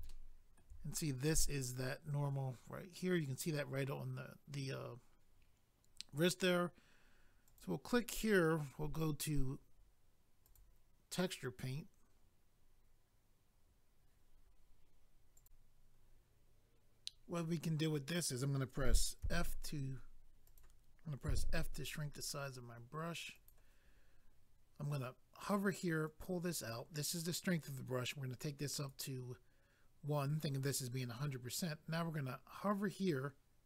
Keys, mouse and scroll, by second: 0.0 shift+middle click, 0.8 scroll up 1, 2.9-4.1 scroll down 1, 7.4 click, 7.6 click, 10.4 click, 10.6 click, 15.4 click, 15.5 click, 20.5 click, 20.6 click, 23.3 click, 23.5 click, 26.0 click, 28.0 click.